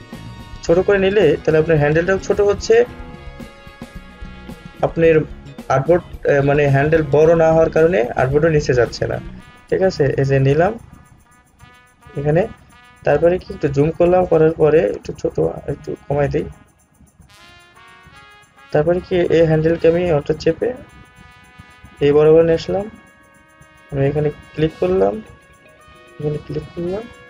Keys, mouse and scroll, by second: 13.6 alt+scroll up 1, 14.3 scroll down 1, 15.3 alt+scroll down 1, 18.6-27.2 alt+drag.